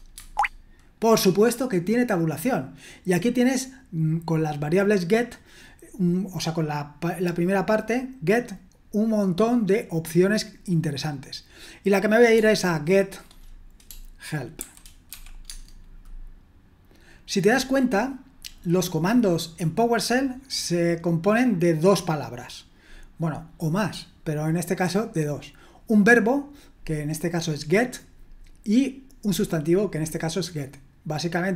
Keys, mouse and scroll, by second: 0.1 Tab, 14.9-15.6 typing.